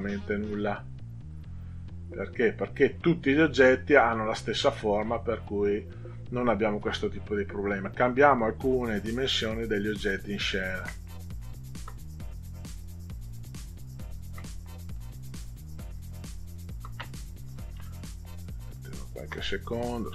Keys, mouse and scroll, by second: 0.0 click, 1.3 click, 2.4 click, 5.2 click, 6.4 click, 7.2 click, 9.5 ctrl+click, 10.8 ctrl+click, 12.4 click, 13.6 ctrl+click, 15.0 click, 16.2 ctrl+click, 17.5 click, 18.8 ctrl+click, 19.6 click.